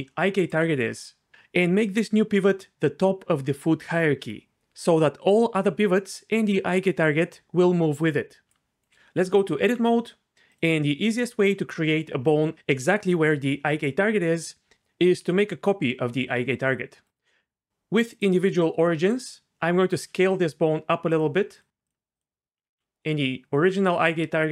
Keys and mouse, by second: 8.4 d, 8.9 d, 9.2 Tab, 14.7 Tab, 15.3 shift+d, 17.0 click, 18.1-19.2 drag, 19.9 s, 22.1 click, 22.7 s.